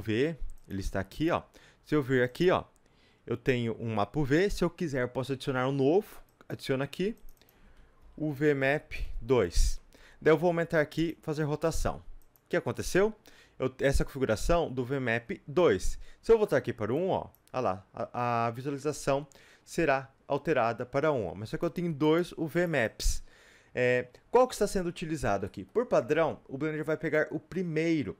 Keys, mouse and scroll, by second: 0.0-21.1 middle drag, 0.0 s, 0.6 click, 0.9 g, 6.5 click, 9.5 KP_Enter, 10.4 s, 11.1 click, 11.4 r, 16.9 click.